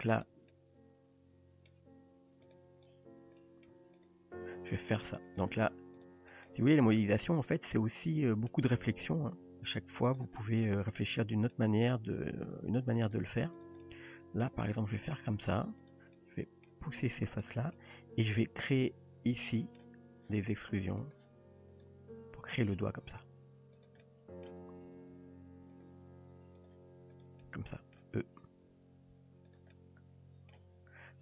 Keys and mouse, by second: 0.2 click, 0.5-1.7 middle drag, 2.4 drag, 3.4-3.7 middle drag, 4.0 click, 5.3 click, 6.0 click, 6.4 middle click, 6.9 s, 7.8 middle click, 9.2 g, 10.4 middle click, 11.0 drag, 11.5-11.9 middle drag, 12.1 g, 13.6 drag, 13.9 middle click, 14.7 g, 15.9 drag, 16.1-16.7 middle drag, 17.0 g, 17.8-18.3 middle drag, 19.5 middle drag, 21.0 click, 21.8 click, 22.8 e, 24.0-24.5 middle drag, 25.2 r, 25.9 g, 27.2 click, 27.4-28.0 middle drag, 28.8 e, 29.7-30.6 middle drag.